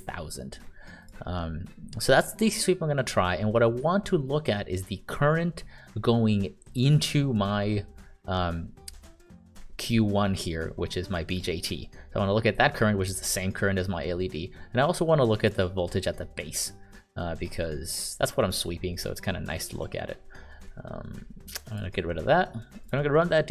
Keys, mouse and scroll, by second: 0.0-0.1 typing, 1.0 click, 6.7 click, 15.4 click.